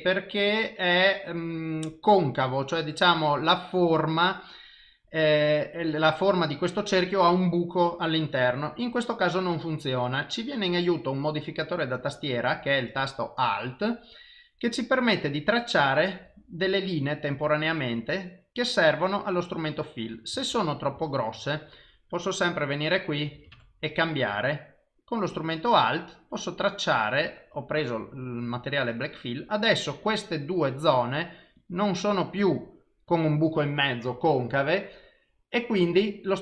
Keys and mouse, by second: 15.2 alt+click, 16.7 alt+click, 20.6 ctrl+z, 21.0 ctrl+z, 22.4 click, 24.7 alt+click, 26.2 alt+click, 30.0 click, 31.6 click.